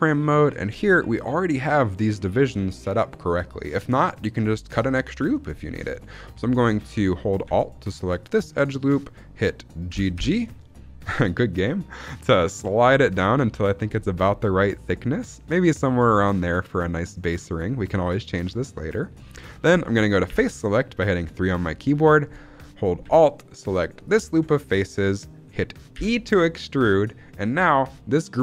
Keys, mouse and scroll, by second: 0.0 shift+middle click, 8.0 alt+click, 9.8 g, 10.1 g, 18.8 click, 20.2 3, 23.9 alt+click, 25.9 e.